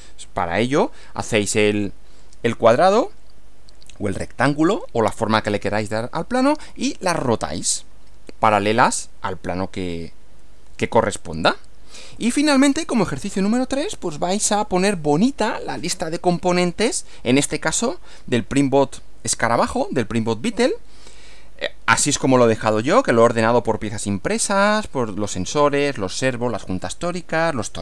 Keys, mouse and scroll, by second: 12.1 Right.